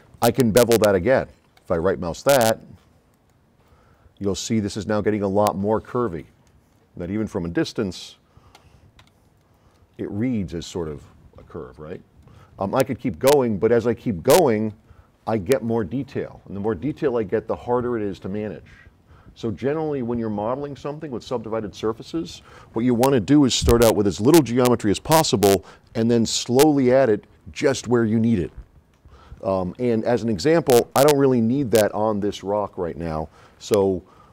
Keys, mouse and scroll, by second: 1.6 right click, 3.2 click, 4.5-6.3 drag, 6.7 middle click, 6.8 scroll down 2, 6.9 middle click, 7.2 middle click, 7.9 click, 9.1 s, 9.1-10.5 right drag, 13.0 middle click, 13.1 scroll up 2.